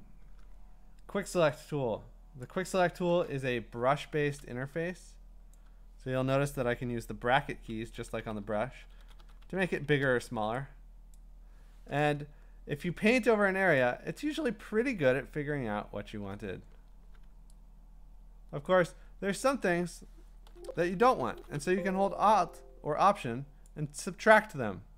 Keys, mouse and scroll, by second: 2.6 click, 3.5 Escape, 5.5 click, 6.7-10.2 typing, 7.6-8.6 drag, 11.2 click, 13.7 click, 14.6-15.9 scroll, 18.6 alt+click, 20.4-21.5 typing, 23.7 alt+click.